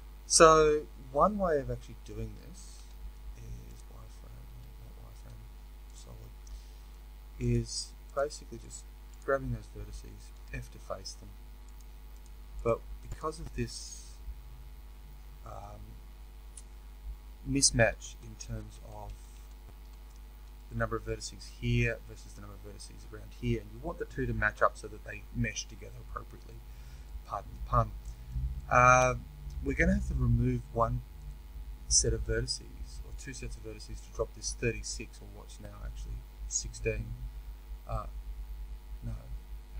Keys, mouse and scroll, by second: 0.0 scroll up 2, 3.6 z, 7.5 click, 8.1 shift+click, 10.3 f, 11.7 click, 12.2 shift+click, 15.4 f, 17.6 ctrl+z, 20.6-39.7 middle drag, 32.3-33.0 scroll down 2.